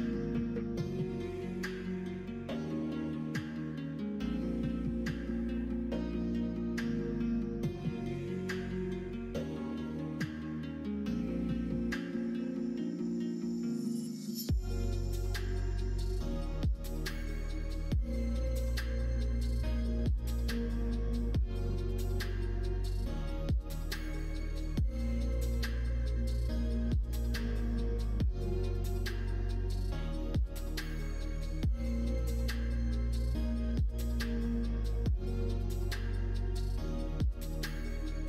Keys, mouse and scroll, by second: 1.1 ctrl+z, 2.0 ., 3.6-4.9 middle drag, 5.7 middle click, 6.3 middle click, 8.3 middle click, 9.0 shift+click, 10.6-11.9 middle drag, 14.1 middle click, 15.4 s, 18.2 alt+z, 18.5-20.0 middle drag, 20.2 scroll up 1, 20.3 middle click, 21.1 l, 23.2 l, 24.0 l, 24.7 shift+click, 25.2 shift+click, 27.4 middle click, 27.8 middle click, 28.8 middle click, 29.3 middle click, 29.8 r, 32.3-34.1 middle drag, 34.4 middle click, 36.6 r.